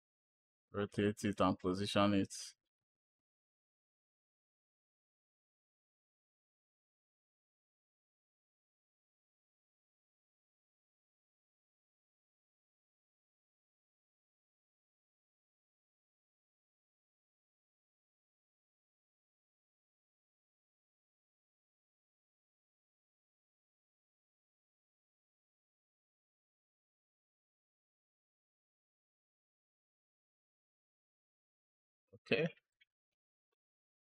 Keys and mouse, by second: 0.1-2.5 drag, 3.8 click, 4.3 g, 4.8 click, 5.2 s, 5.7 g, 6.0 click, 8.3 click, 8.8 click, 9.0 click, 9.6 click, 11.1 k, 11.5 click, 12.2 click, 12.8 click, 14.5 click, 15.8 k, 16.4 click, 16.7 click, 17.0 click, 17.1-21.1 typing, 17.8 click, 19.2 click, 19.7 click, 20.5 click, 21.4 click, 23.1 ctrl+z, 23.7 space, 24.0 ctrl+z, 24.4 ctrl+z, 24.6 drag, 24.8 space, 25.1 space, 25.5 space, 25.8 click, 26.2 click, 26.8 drag, 27.0 space, 27.2 space, 27.4 click, 30.8-31.2 drag, 31.3 space, 31.9 space, 32.6 click, 33.7 click.